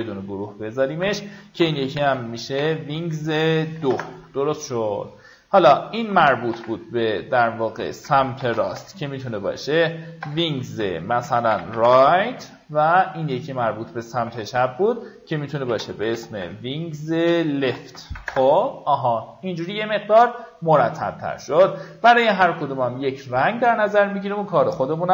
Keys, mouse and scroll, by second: 0.4 click, 1.5-2.5 typing, 3.5 2, 3.7 Return, 5.1 click, 5.6 ctrl+click, 6.4 ctrl+g, 7.0 click, 8.0-12.1 typing, 12.8 click, 13.2 ctrl+click, 14.1 ctrl+g, 14.6 click, 15.3-18.0 typing, 18.1 Return, 19.1 right click, 20.3 click, 21.5 right click, 22.8-23.8 drag, 24.7 alt+scroll up 1.